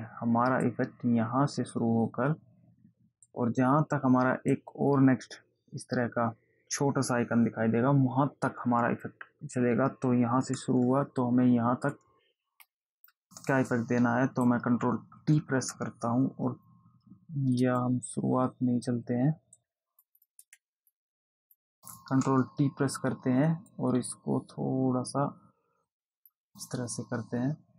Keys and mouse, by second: 0.0 click, 3.6 click, 12.2 click, 14.0 click, 15.6 ctrl+t, 18.2 click, 21.1 click, 22.6 ctrl+t, 24.1 click.